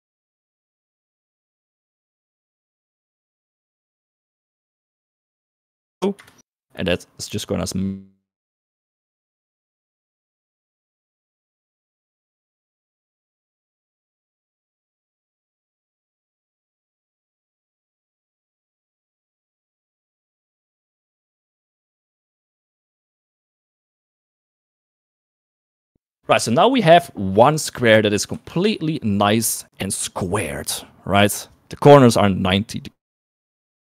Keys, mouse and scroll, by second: 28.7 s, 30.0 shift+middle click.